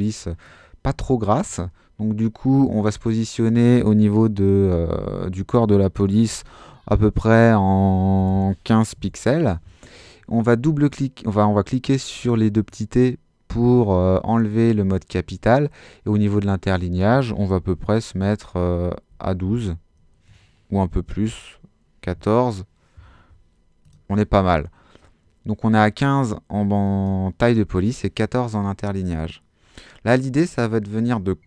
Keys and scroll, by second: 6.0-6.9 typing, 8.2-9.5 typing, 19.1 |, 19.4 2, 20.7 BackSpace, 22.1 4.